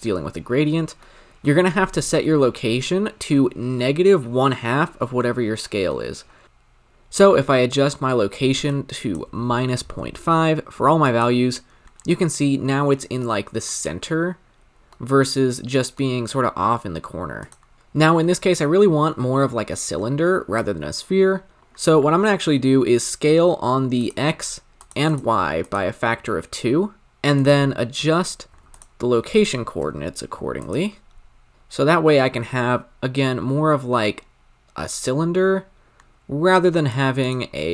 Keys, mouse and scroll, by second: 6.4 ctrl+z, 11.0 alt+click, 13.2-17.4 middle drag, 17.4 click, 17.7-19.1 drag, 21.6-24.9 drag, 25.0 click, 27.0-28.9 drag, 29.3-30.7 drag, 31.5-33.8 shift+drag, 37.2-37.7 drag.